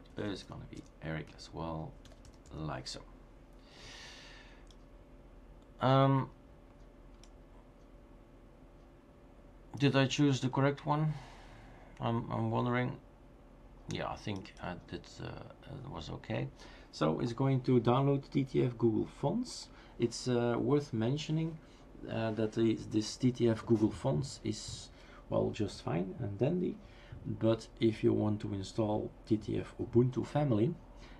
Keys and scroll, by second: 0.0-0.9 typing, 2.0-2.9 typing.